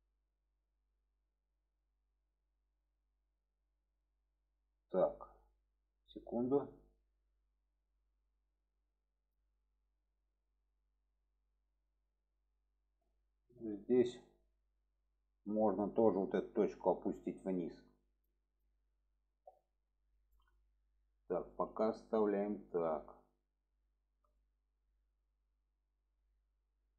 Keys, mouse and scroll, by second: 10.4 middle click, 11.1-12.8 middle drag, 13.4 middle click, 14.2-14.5 middle drag, 15.5-15.8 middle drag, 16.3 click, 16.6 middle click, 17.6 click, 19.1-19.5 middle drag, 19.8 middle click, 20.4-21.0 middle drag, 21.5 shift+middle click, 21.9-22.4 middle drag, 22.7 shift+middle drag, 23.8-24.2 shift+middle drag, 24.4-25.9 middle drag, 26.3-26.8 shift+middle drag.